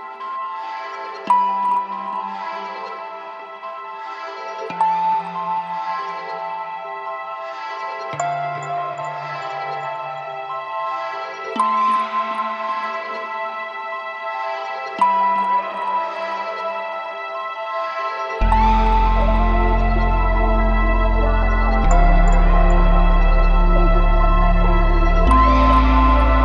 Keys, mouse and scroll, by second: 4.3 click, 5.3-7.4 drag, 7.8 click, 9.3-10.3 drag, 11.0-12.7 drag, 15.1 v, 16.0 a, 16.6 click, 19.3 v, 20.1 s, 21.4 s, 21.9 s, 22.3 s, 22.8 click, 25.4 space.